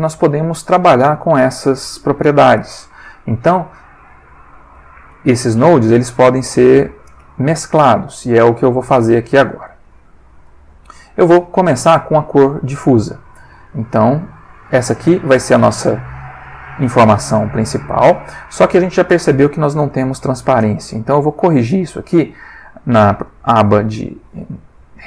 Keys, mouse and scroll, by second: 3.0 click, 5.1 g, 5.9 click, 6.5 click, 7.6 click, 10.0 click, 13.6-14.9 drag.